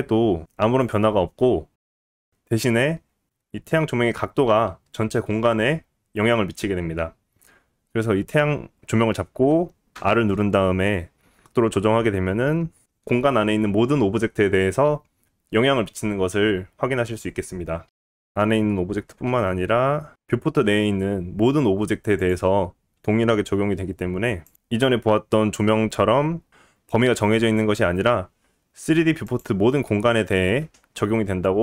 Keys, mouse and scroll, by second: 9.9 r, 17.9 click, 17.9 scroll down 2, 17.9 shift+d, 22.2 click, 22.3-30.8 middle drag, 23.7 g, 25.2 r, 30.8 click, 30.9 middle drag, 31.2-31.6 scroll up 2.